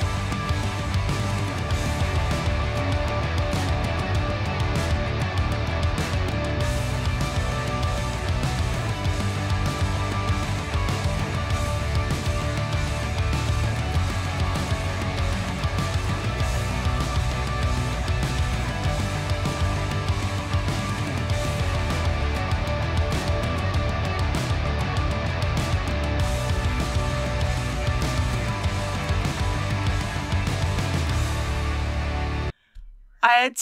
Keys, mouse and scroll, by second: 0.4-0.9 scroll up 1, 1.2 middle click, 2.5 click, 3.3 typing, 5.2 click, 5.4-6.2 typing, 8.6 click, 8.9 middle click, 9.8 r, 11.1 click, 12.1 shift+click, 12.3 shift+g, 13.4 click, 13.9 KP_1, 14.3-14.6 scroll down 1, 14.7 shift+middle click, 15.6 click, 15.9 typing, 18.8 shift+click, 19.3 shift+s, 20.6 click, 21.8 g, 23.0 click, 23.9 g, 24.8 click, 25.1 r, 26.3 click, 26.8 shift+click, 28.6 shift+g, 29.1 x, 30.6 click.